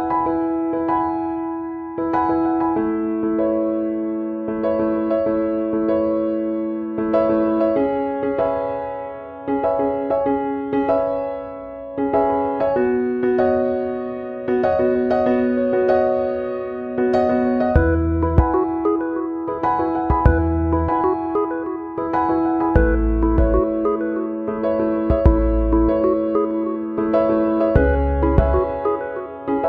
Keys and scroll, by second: 22.2 ctrl+[, 25.3 ctrl+[.